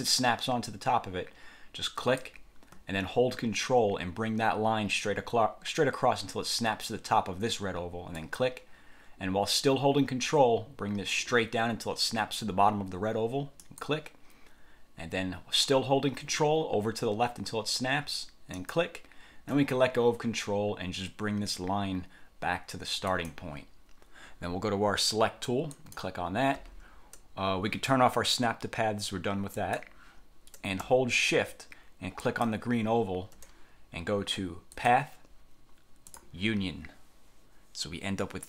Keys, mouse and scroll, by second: 2.1 click, 8.3 ctrl+click, 13.7 ctrl+click, 18.7 ctrl+click, 23.3 click, 25.9 click, 29.7 click, 32.3 shift+click, 34.9 click, 36.2 click.